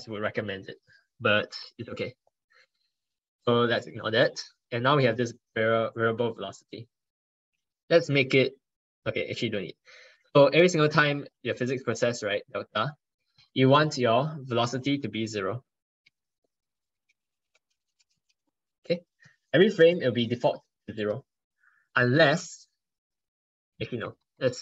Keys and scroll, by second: 11.4 ctrl+Right, 11.6 ctrl+Right, 12.0 ctrl+Right, 23.9 ctrl+shift+Left, 24.0 ctrl+shift+Left, 24.2 ctrl+shift+Left.